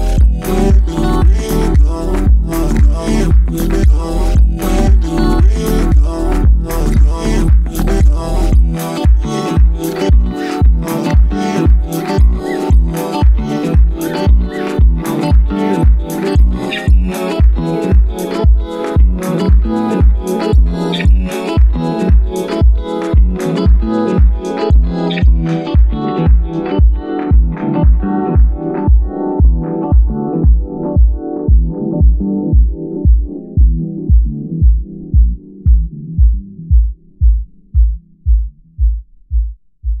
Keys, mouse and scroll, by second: 0.5 x, 1.3-4.3 middle drag, 4.3 click, 5.5 click, 6.5-9.7 drag, 10.2 click, 11.5 ctrl+a, 13.1 KP_Divide, 13.8 click, 16.2 click, 17.5 KP_7, 18.3 g, 23.4-24.6 middle drag, 24.6 click, 26.3 KP_3, 27.8 g, 32.1 KP_7, 32.8 g, 36.4 click, 36.7-40.0 middle drag.